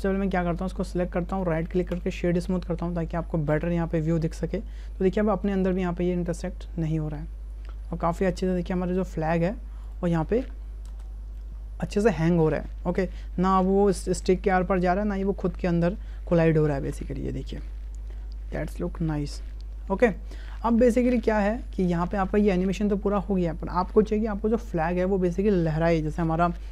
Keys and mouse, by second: 0.5 click, 1.3 click, 3.5 click, 4.2 space, 6.8-8.1 middle drag, 8.3 space, 8.9 click, 9.5 `, 10.9 space, 13.5 space, 16.3 click, 16.9 space, 19.6 space, 20.0 click.